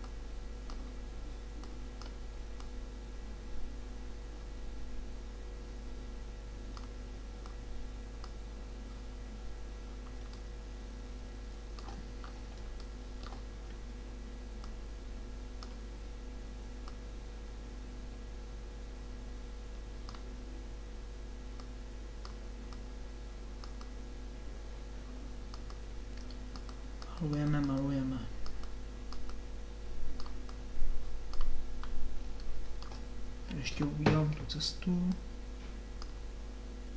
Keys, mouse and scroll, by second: 0.0-1.6 drag, 2.7-4.7 drag, 7.5-10.0 drag, 10.4-12.3 drag, 12.7-14.5 middle drag, 14.5-18.9 drag, 21.6-25.6 drag, 25.6 middle click, 25.8 click, 26.2-27.5 drag, 27.7-32.0 drag, 32.0 middle click, 32.3 click, 32.5 middle click, 35.2-36.9 drag.